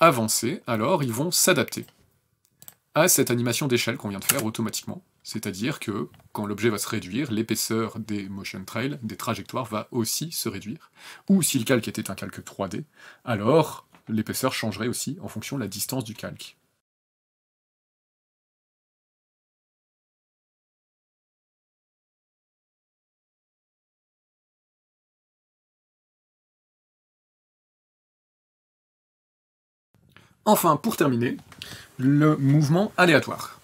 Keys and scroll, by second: 4.0 KP_0, 8.9 KP_0, 9.4 KP_0, 14.6 KP_0.